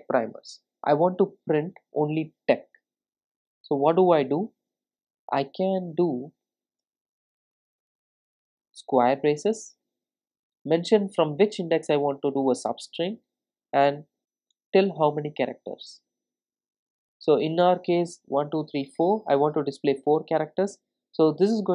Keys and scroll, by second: 0.8 Return, 6.8 Return, 9.7 Return.